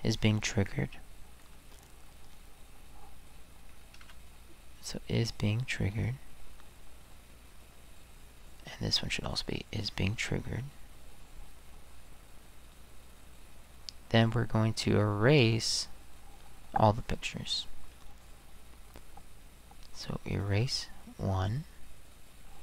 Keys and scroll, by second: 4.0 space, 9.0 space.